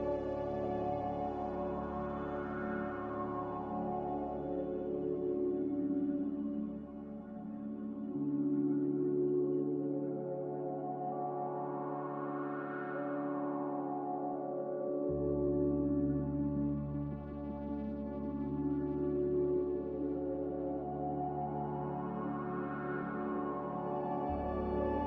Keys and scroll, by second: 5.9 n, 14.4 b, 17.8 m, 21.4 n.